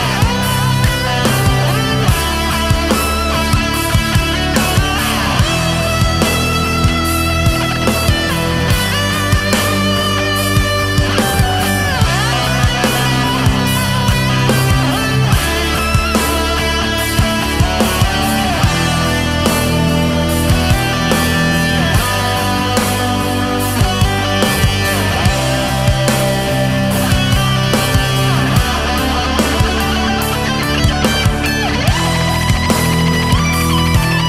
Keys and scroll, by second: 6.4 ctrl+z, 6.8 ctrl+z, 8.2 ctrl+z, 9.0 ctrl+z, 11.2 space, 11.6 ctrl+z, 13.0 ctrl+z, 13.6 ctrl+z, 16.5 space, 17.4 space, 18.2 ctrl+z, 19.2 ctrl+z, 19.5 ctrl+z, 19.6 ctrl+z, 20.1 space, 21.3 space, 25.3 ctrl+z, 28.4 ctrl+z, 29.8 ctrl+z, 31.2 ctrl+z, 32.8 ctrl+z, 33.0 KP_4, 33.4 KP_6, 34.0 ctrl+z.